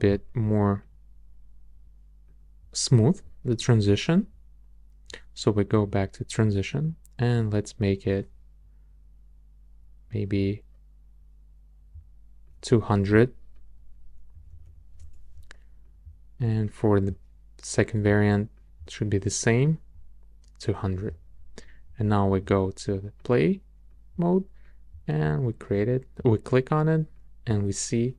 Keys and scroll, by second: 14.1-15.0 typing.